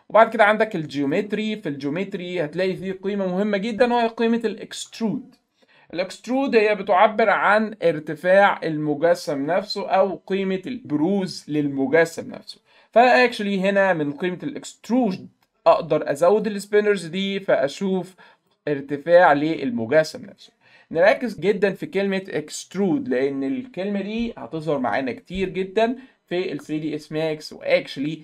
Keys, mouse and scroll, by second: 1.1 click, 16.4-18.5 drag, 18.6 middle click, 18.9 middle click.